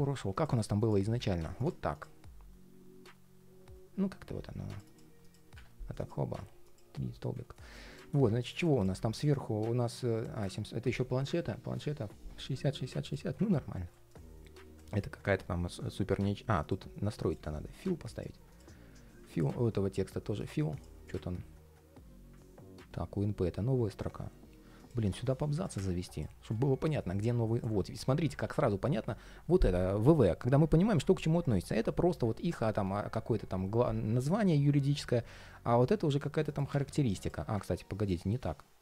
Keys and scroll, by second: 28.2 super+z.